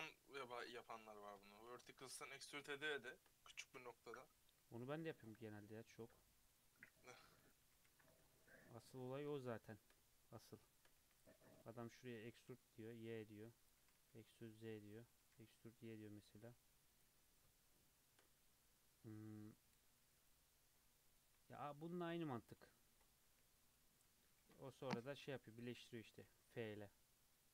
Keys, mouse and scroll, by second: 1.4-2.4 shift+middle drag, 2.4 2, 2.7 click, 3.0 shift+middle click, 3.4 e, 5.0 1, 5.1 click, 5.4 g, 7.2 2, 7.4 click, 7.6 e, 9.4 shift+middle click, 9.9-11.0 scroll up 1, 11.0 1, 11.2 click, 11.5 click, 12.2 e, 13.8 e, 15.1 e, 20.0 2, 20.2 click, 21.3 ctrl+z, 21.7 ctrl+z, 21.9 ctrl+z, 22.1 ctrl+z, 22.5 ctrl+z, 23.3 2, 24.3 ctrl+z, 25.2 2, 25.5 click, 25.7 e.